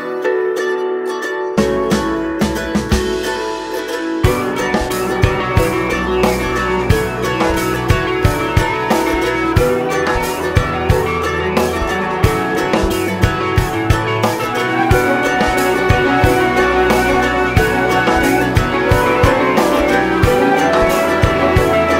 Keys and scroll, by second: 1.3 ctrl+d.